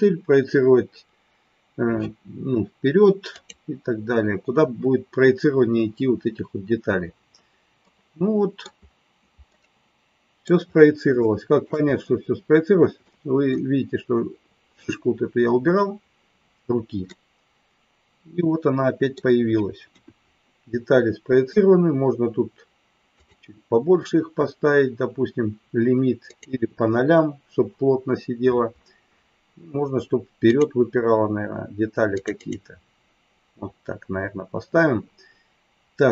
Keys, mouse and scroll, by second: 7.8 middle click, 9.6 middle click, 11.2 shift+middle click, 13.0 middle click, 17.1-19.2 middle drag, 19.9 KP_1, 23.1 click, 26.2 click, 30.4 click, 32.8 click.